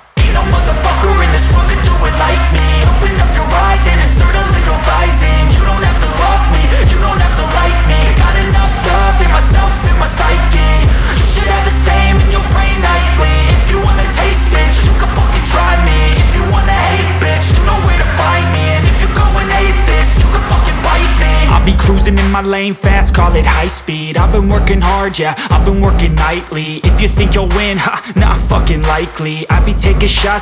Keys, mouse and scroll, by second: 1.6 click, 2.8 ctrl+j, 3.3 ctrl+shift+a, 8.2 click, 8.4 space, 8.5 click, 9.0 space, 10.0 click, 14.0 click, 17.6 click, 19.1 click, 23.0 click, 25.2 click, 27.2 click.